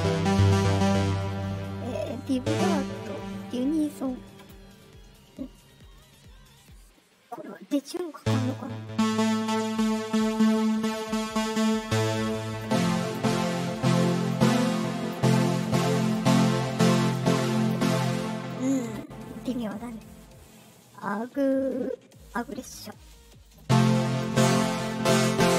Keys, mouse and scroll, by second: 9.3-18.4 drag, 23.4-25.5 drag.